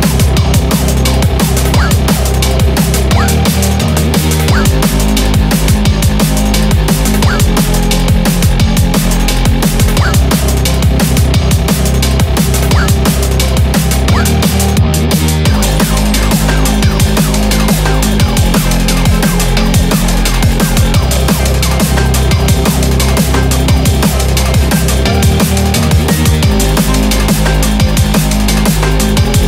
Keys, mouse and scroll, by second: 1.3 2, 1.4 3, 11.0 2, 22.0 2, 27.6 2, 27.7 5, 28.4 3, 28.5 7.